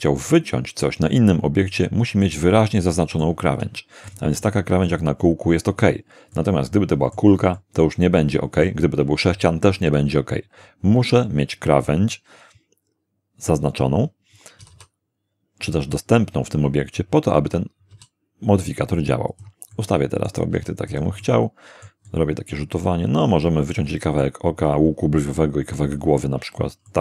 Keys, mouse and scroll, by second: 1.6-2.4 middle drag, 2.5-3.4 middle drag, 3.6 s, 4.1 click, 4.4 g, 4.9 click, 6.3-7.3 middle drag, 7.6-8.8 shift+middle drag, 14.6 r, 14.7 r, 15.6 click, 17.9 g, 19.3 click, 19.7-20.5 middle drag, 20.5 g, 20.9 click, 21.6 middle click, 23.7 middle click, 26.9-27.0 middle drag.